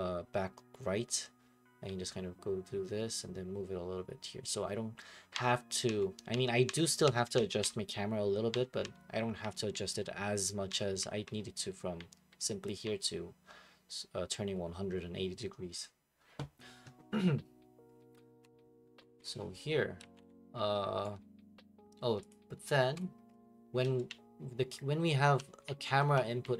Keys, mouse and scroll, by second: 18.4 Escape, 19.8-21.0 typing, 20.8 scroll, 20.9 middle click, 21.0 right click, 22.3 click, 23.0 click.